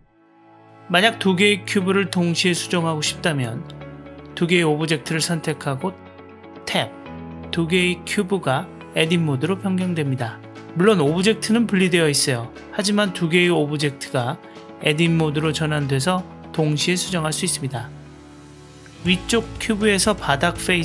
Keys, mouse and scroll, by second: 1.5 click, 2.5 click, 6.8 Tab, 8.1-12.6 middle drag, 13.1 click, 14.0-15.1 middle drag, 16.4 click, 17.3 click, 20.4 Delete.